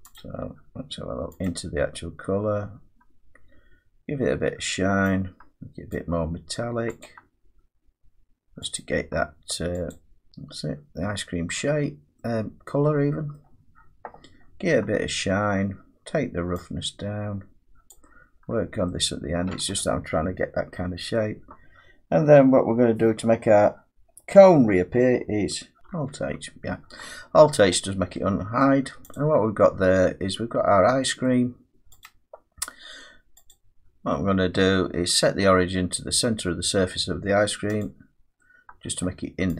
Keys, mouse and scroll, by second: 0.1 click, 1.4 click, 5.9 click, 7.0 click, 8.8 click, 10.3 middle click, 12.1 middle click, 12.5-12.9 scroll down 5, 13.4 middle click, 13.4 scroll down 1, 14.4 scroll down 4, 14.6 scroll up 2, 15.2-15.9 scroll down 2, 15.9-17.3 scroll down 1, 17.9 click, 18.4-18.9 scroll down 6, 19.8 scroll, 21.1 middle click, 25.8 alt+h, 25.8 click, 27.7 middle click, 28.0 scroll up 1, 29.1 click, 31.2 middle click, 32.0 click, 33.5 click, 37.8 click, 39.0 middle click.